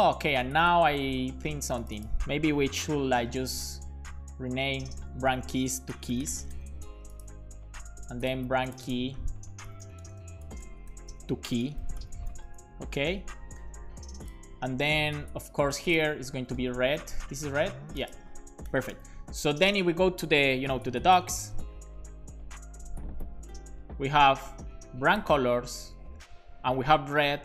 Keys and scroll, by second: 2.9 super+d, 4.6 super+d, 5.9-6.8 typing, 9.8 super+d, 11.7 super+d, 12.6-13.8 typing, 16.2-17.2 typing, 18.7 alt+shift+f, 19.0 super+s.